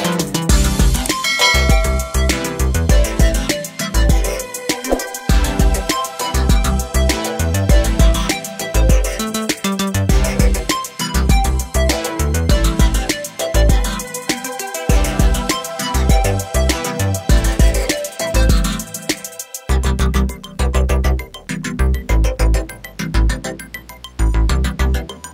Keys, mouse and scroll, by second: 0.3 click, 1.0 Page_Down, 4.8 scroll down 1, 5.9 scroll down 1, 6.6 click, 7.7 click, 9.7 click, 11.0 Page_Up, 12.0 Page_Down, 13.5 ctrl+o, 14.5 scroll down 1, 16.6 scroll down 1, 17.1 click, 18.0 click, 19.3 click, 20.4 click, 22.2 click, 23.2 Page_Down, 24.5 click.